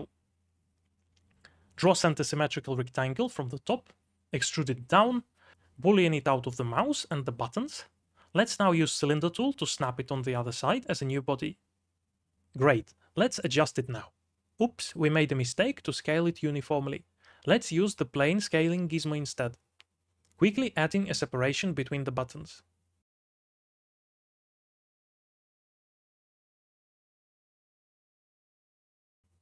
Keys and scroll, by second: 1.5 4, 2.1 shift+z, 2.8 c, 3.2 alt+z, 4.1-8.5 typing, 10.8 b, 12.0 4, 24.2 g, 24.6 shift+w, 25.7 ctrl+r, 25.8 Tab, 27.2-29.4 typing.